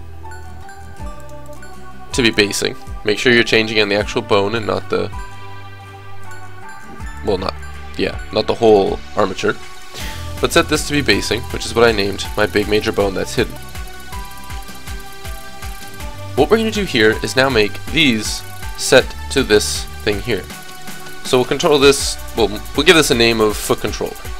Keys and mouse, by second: 1.5-4.2 drag, 7.2-11.7 drag, 12.4 middle click, 16.9-22.5 drag, 18.0 right click, 20.7 right click, 24.1 o.